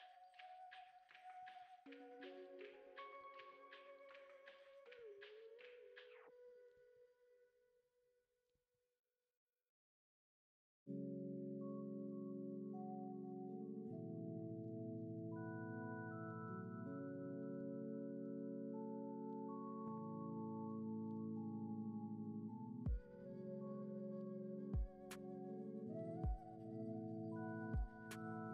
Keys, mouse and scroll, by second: 2.1-3.1 middle drag, 3.1 shift+d, 5.8-7.3 drag, 7.8-8.9 middle drag, 8.9 shift+a, 11.1-12.7 drag, 12.7 shift+d, 14.3 middle click, 14.7-15.6 scroll up 3, 15.6 click, 17.4 middle click, 18.2-19.4 drag, 20.1-22.2 middle drag, 22.2 click, 23.9-25.2 drag, 25.2 middle click, 26.1-27.2 drag, 28.1-28.5 drag.